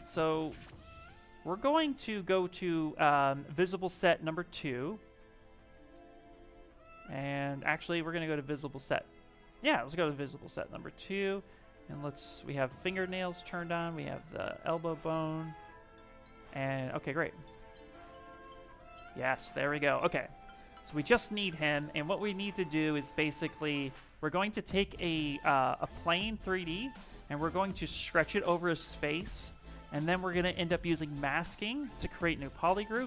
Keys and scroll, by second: 23.3 s.